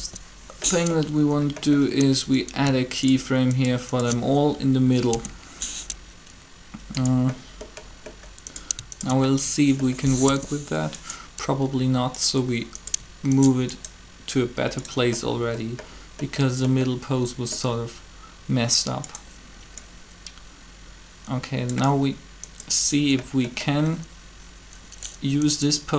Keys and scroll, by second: 4.9 shift+i, 10.2 7.